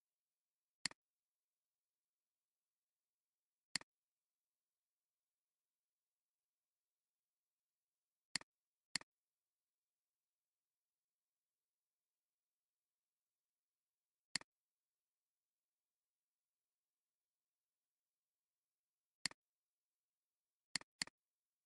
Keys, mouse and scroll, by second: 15.6 click, 17.3 scroll down 1, 20.8 double click.